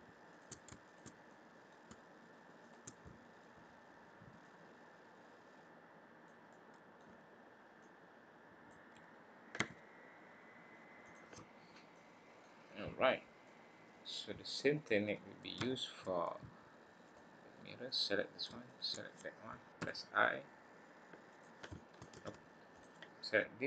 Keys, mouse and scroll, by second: 0.3 shift+click, 1.2 click, 1.2 middle click, 2.6 shift+click, 3.0 middle click, 4.4 click, 6.5 middle click, 7.8 click, 9.5 s, 11.4-11.9 scroll down 2, 11.9 middle click, 12.9-13.4 scroll down 1, 13.4 middle click, 14.3-15.2 scroll up 4, 15.6 shift+middle click, 17.0 click, 17.8 click, 18.6 shift+click, 19.8 i, 22.1 ctrl+z, 22.7 click.